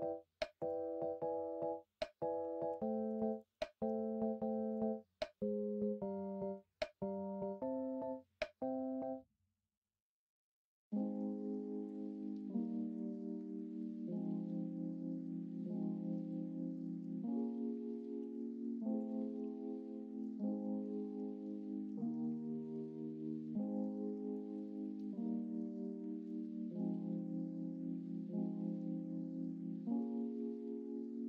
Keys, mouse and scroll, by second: 2.7 2, 11.8-16.2 drag, 16.2 2, 18.1 e, 19.1 ctrl+z, 20.2 e, 23.9 ctrl+z, 25.5 e.